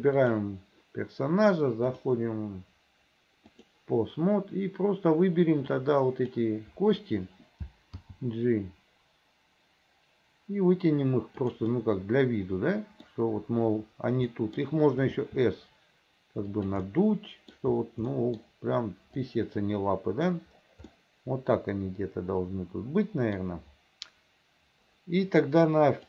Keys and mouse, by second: 2.0-3.8 drag, 6.0 click, 8.1 g, 12.0 click, 12.8 middle click, 14.5 middle click, 15.3 s, 16.9 middle click, 18.2 middle click, 19.5 click, 21.1-23.5 drag.